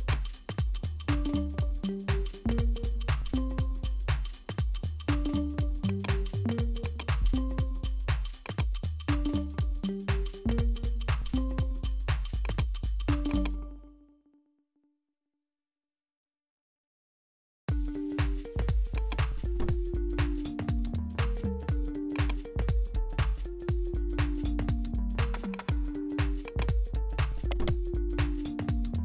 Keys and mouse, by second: 4.0 r, 6.9-10.8 drag, 12.5 click, 13.4 click, 19.0 click, 20.6-22.3 drag, 23.8-25.7 drag, 26.5 click, 27.8 right click.